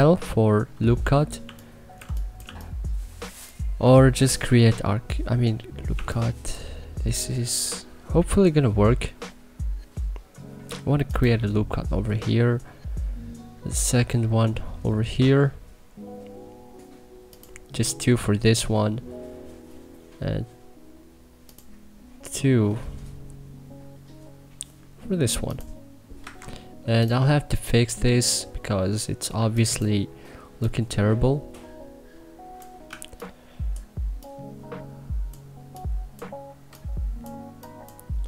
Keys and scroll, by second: 1.1 2, 1.7 1, 2.1 2, 5.6 1, 25.9 Escape, 29.1 1.